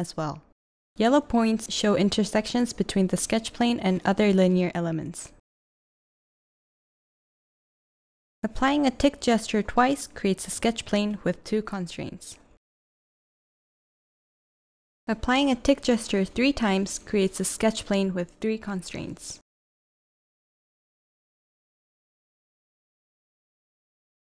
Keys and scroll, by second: 5.3 v, 7.6-9.2 typing, 14.8-15.8 typing, 18.1 v, 20.9 v.